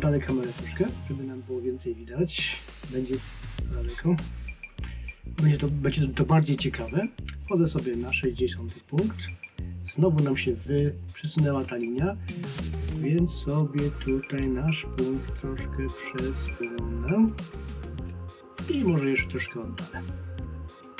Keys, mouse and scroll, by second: 8.0 click, 17.7-18.0 scroll down 1.